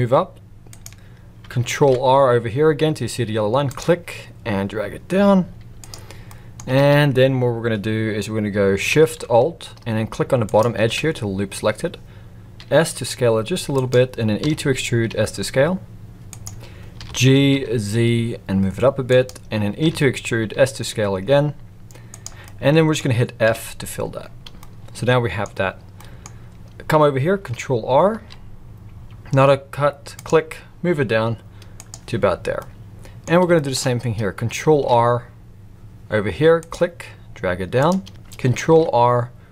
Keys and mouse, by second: 1.8 ctrl+r, 6.3 middle click, 6.8 alt+a, 10.4 alt+shift+click, 12.5 s, 14.4 e, 17.0 g, 19.8 e, 22.4-22.9 middle drag, 23.4 f, 24.6-25.4 middle drag, 25.9 middle click, 28.1 ctrl+r, 32.6 middle click, 33.6 shift+middle click, 34.7 ctrl+r, 38.7 ctrl+r.